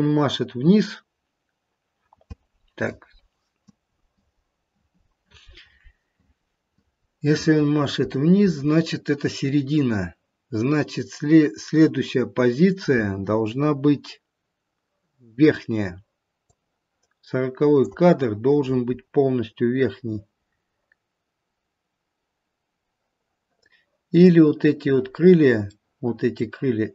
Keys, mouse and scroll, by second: 16.4 click, 24.2 click, 25.8 middle click.